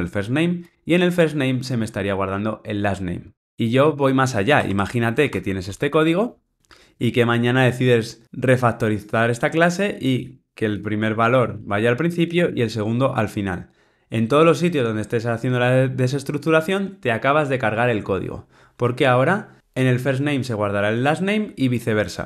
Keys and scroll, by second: 10.2 super+x, 10.6 Delete, 12.3 Delete, 12.4 super+v.